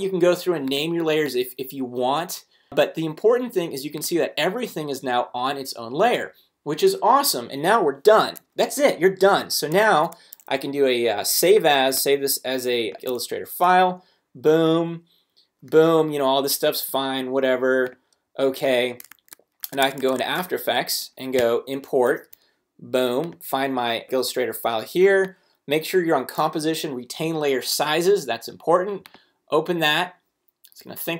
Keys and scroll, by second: 9.7 shift+super+s, 13.6 Return, 19.1 super+Tab, 21.4 super+i.